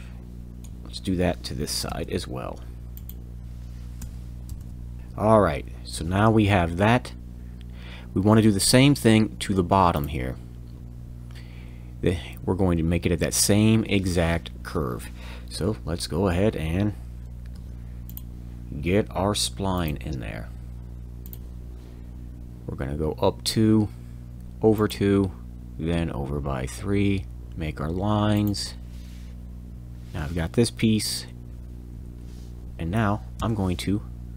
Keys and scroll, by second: 1.8 f, 4.0 5, 4.5 m, 5.0 Return, 17.5 c, 27.4 l, 29.7 Return, 31.0 e, 33.4 e.